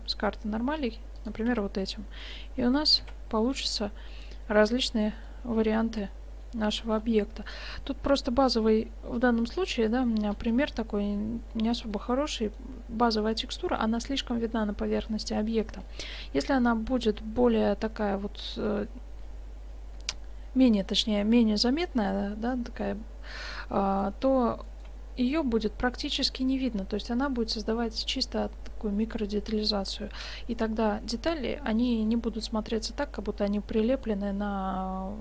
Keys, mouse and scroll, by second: 1.5 Tab, 2.3 click, 2.6 middle click, 3.1 shift+z, 22.3-26.5 middle drag, 32.4-34.6 middle drag.